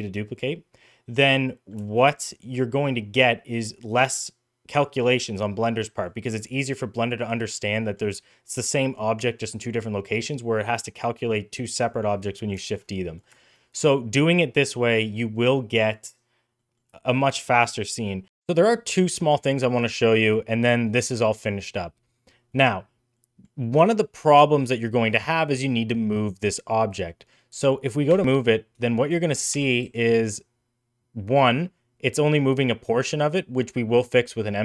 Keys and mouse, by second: 1.0 middle click, 1.7 shift+middle drag, 2.0 middle click, 2.7 middle click, 3.4 middle click, 4.6-5.9 middle drag, 7.4 middle click, 12.0-12.3 middle drag, 12.5 shift+middle click, 12.7-13.0 middle drag, 13.3 shift+middle click, 13.5-14.1 middle drag, 14.5-15.8 middle drag, 16.4 middle drag, 16.8 shift+middle click, 17.0 middle click, 17.5-18.2 middle drag, 23.1 middle click, 23.8 middle click, 27.0 middle click, 28.1 g, 29.1 g, 29.8 g.